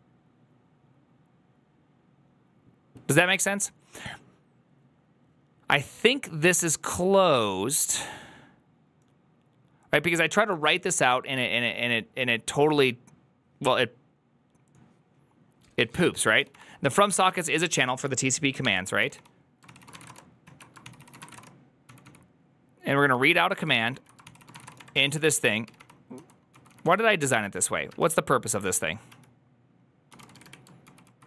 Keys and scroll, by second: 18.2-31.2 typing, 20.3 ctrl+o, 20.7 ctrl+c, 21.0 ctrl+c, 21.2 Return, 23.8 ctrl+o, 24.1 ctrl+c.